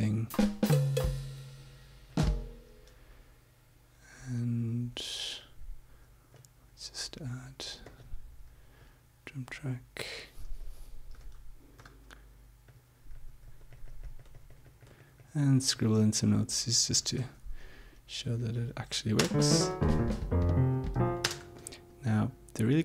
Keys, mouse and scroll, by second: 0.2-2.7 drag, 6.4 click, 7.9 click, 8.8 click, 11.1 e, 11.8 d, 12.7 click, 13.1-16.6 drag, 17.7 Home, 17.7 End, 18.3 Home, 19.1 space, 21.2 space.